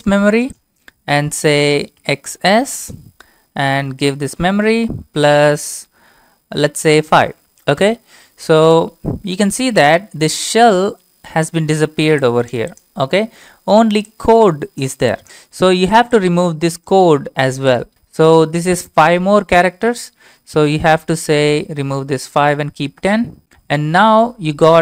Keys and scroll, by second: 1.8-2.8 typing, 4.1 ctrl+v, 4.8-5.5 typing, 6.8-7.5 typing, 7.8 Return, 20.0 Up, 20.7 Left, 21.1 Right, 21.5-22.8 typing, 23.0 Return.